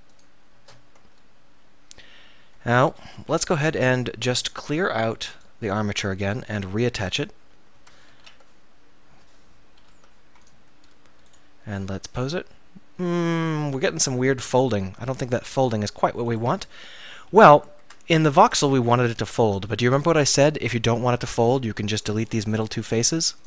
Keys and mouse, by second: 1.1 middle click, 1.5 middle click, 2.9 KP_1, 3.2 KP_3, 6.0 Tab, 8.3 ctrl+p, 9.9 ctrl+p, 11.8 r, 16.5-17.9 right drag, 17.9 Tab, 18.5 Tab, 19.5 Tab, 22.4 click, 23.1 x.